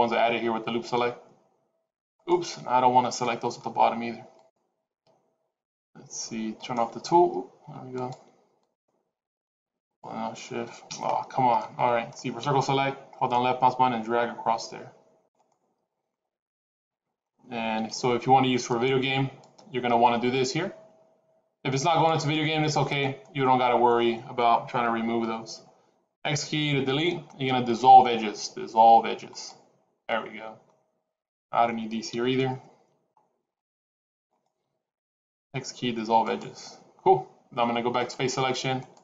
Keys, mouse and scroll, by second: 2.4 middle click, 4.2 shift+click, 6.5 right click, 7.8 shift+click, 8.9 shift+click, 9.9 shift+click, 10.9-11.5 scroll up 4, 11.5 middle click, 12.3 c, 15.7-17.1 scroll down 4, 15.9 middle click, 17.6 c, 22.5 middle click, 26.1 x, 30.0 middle click, 31.9 c, 35.3 x, 37.9 click, 38.7 click.